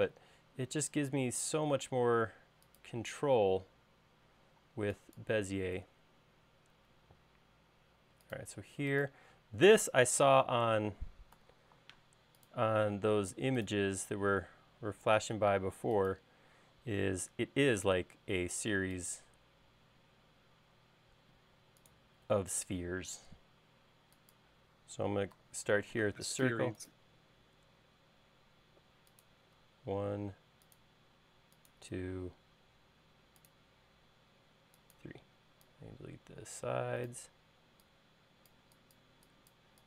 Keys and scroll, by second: 5.2 e, 7.4 l, 12.0 a, 21.8 l, 26.1 c, 35.9 e.